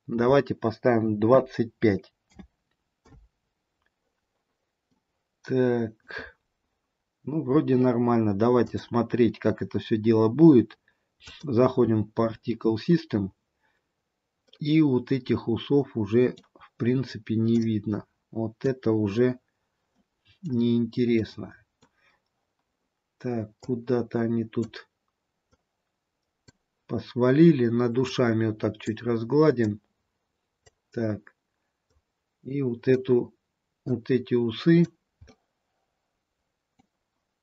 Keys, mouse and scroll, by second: 4.8 middle click, 6.9-7.8 scroll down 2, 8.5 click, 13.8-14.6 scroll up 1, 14.6-16.5 scroll up 1, 17.6 click, 20.0 middle click, 21.3 middle click, 22.2-23.8 scroll down 1, 23.8 click, 25.7 click, 29.8 click, 32.0 click, 35.4 middle click.